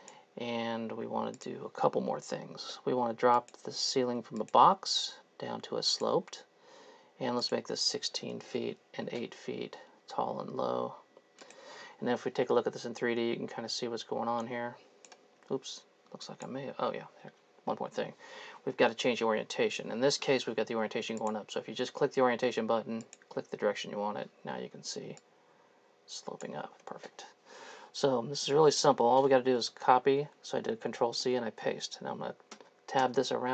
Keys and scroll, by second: 8.5 KP_6, 12.6 3, 15.4 Escape, 24.7 3, 26.7 Escape, 29.8 ctrl+c, 31.2 ctrl+v, 32.6 Tab, 33.0 Tab.